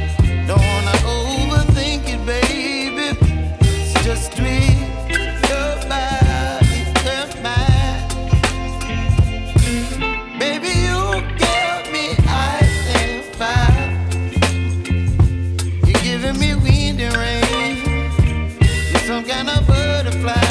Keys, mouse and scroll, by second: 3.8 click, 8.4 ctrl+e, 12.1 click, 14.1 space, 14.3 click, 14.7 space, 15.0 click, 15.3 space, 15.6 click, 15.8 space, 17.3 click.